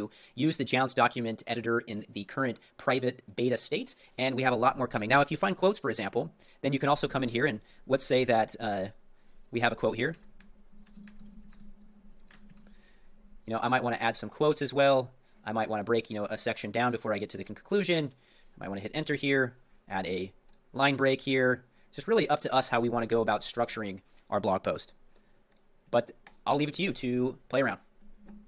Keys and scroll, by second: 6.9 super+m, 13.8 super+m, 18.2 super+m.